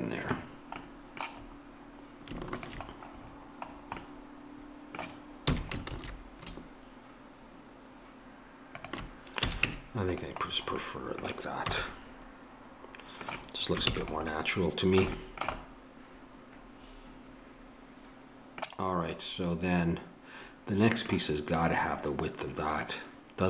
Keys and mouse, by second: 2.6-9.4 drag, 9.4 a, 9.7 Tab, 11.7 a, 13.8 ctrl+s.